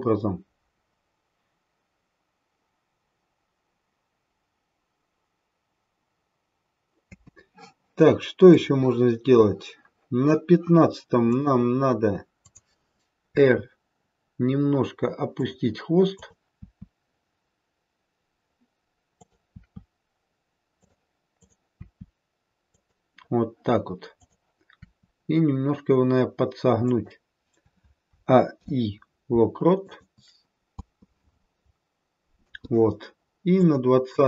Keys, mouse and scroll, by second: 7.1 space, 8.4 click, 11.2 click, 12.4 click, 13.3 r, 16.1 click, 19.1 r, 19.4 r, 21.3 click, 21.7 r, 24.1 click, 24.8 r, 28.0 a, 28.5 i, 30.7 space, 32.4 space, 33.6 click.